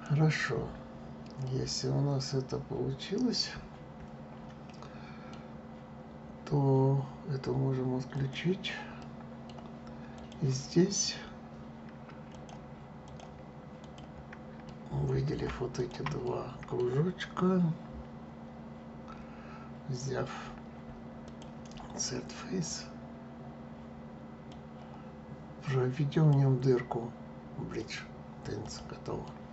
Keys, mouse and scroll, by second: 1.4-4.5 middle drag, 8.1 click, 8.9-10.1 middle drag, 10.1 click, 12.3-13.9 drag, 14.6-15.7 middle drag, 15.7 shift+click, 16.2-19.2 middle drag, 21.2 click, 22.6 click, 26.1-28.7 drag, 29.2-29.5 middle drag.